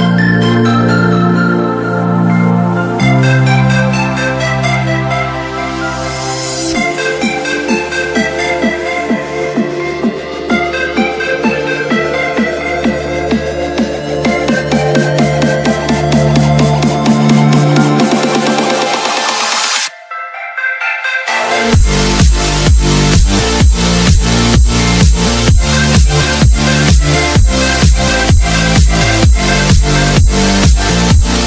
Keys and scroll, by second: 0.2 space, 2.8 space, 4.0 shift+Page_Down, 4.6 Escape, 9.4 space, 13.2 t, 13.7 Escape, 14.6 alt+c, 16.2 F3, 19.7 alt+c, 21.5 Escape, 24.3 alt+c, 28.9 shift+Page_Down, 29.6 alt+c, 30.8 Escape.